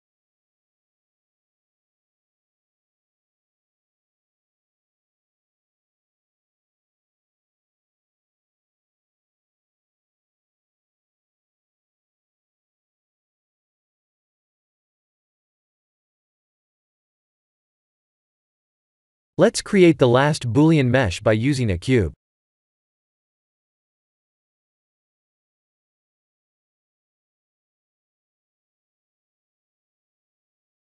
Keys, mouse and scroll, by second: 1.4 alt+click, 2.8 f, 3.3 middle click, 4.8 alt+click, 5.9 alt+click, 7.9 f, 8.7 s, 11.7-12.4 middle click, 11.9 middle click, 12.1 middle click, 14.8 KP_1, 16.0 click, 16.2 Tab, 16.7 click, 17.9 click, 20.0 shift+a, 23.3 s, 25.8 g, 28.2 s, 29.5 g.